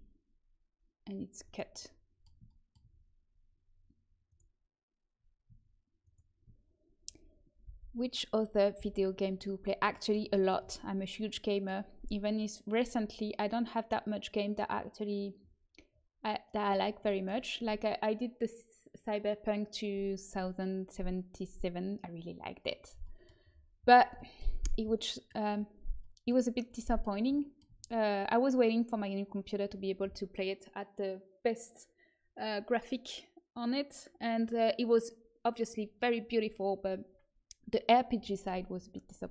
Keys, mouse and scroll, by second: 0.7-3.2 middle drag, 4.2-7.6 right drag, 7.6 v, 8.7 v, 12.2-20.9 middle drag, 23.0-31.1 middle drag.